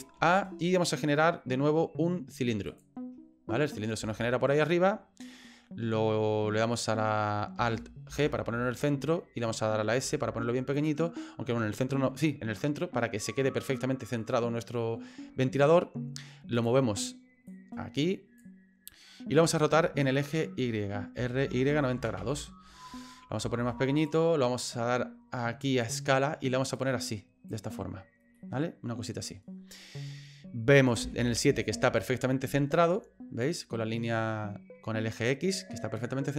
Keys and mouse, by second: 0.1 shift+a, 4.1 shift+click, 8.1 alt+g, 10.0 s, 13.8-14.9 middle drag, 17.6 click, 20.1 shift+middle click, 21.2 r, 23.4 s, 25.8 click, 26.8 click, 28.4-29.4 middle drag, 31.0 KP_7, 36.1 middle click.